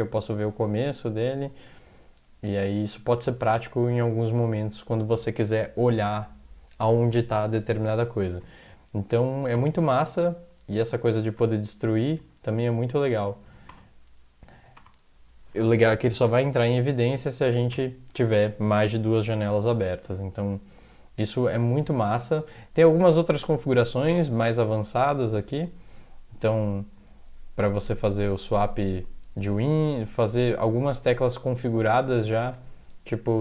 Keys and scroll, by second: 8.3 ctrl+x, 9.6 o, 11.4 x, 12.1 3, 13.5 ctrl+x, 13.7 o, 14.6 ctrl+x, 14.8 o, 17.5 ctrl+x, 17.7 0, 22.2 alt+Tab.